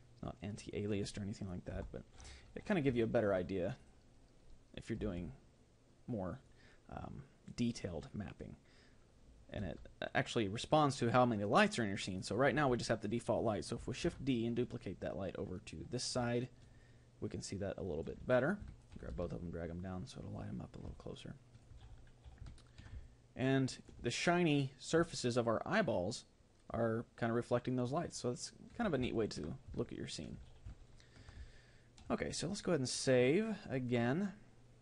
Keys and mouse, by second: 1.7 KP_7, 3.8-5.0 middle drag, 3.8-7.7 right drag, 5.0 g, 10.3 g, 13.1-16.8 right drag, 13.1 g, 16.8-19.1 middle drag, 19.1-21.0 right drag, 19.1 g, 21.0-27.1 middle drag, 29.4-34.8 middle drag.